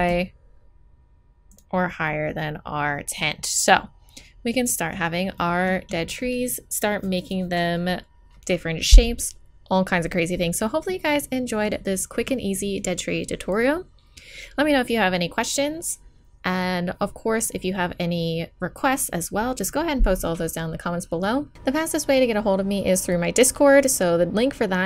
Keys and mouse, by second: 3.1 middle click, 3.9-5.4 middle drag, 7.0-11.5 middle drag, 12.4-13.9 middle drag.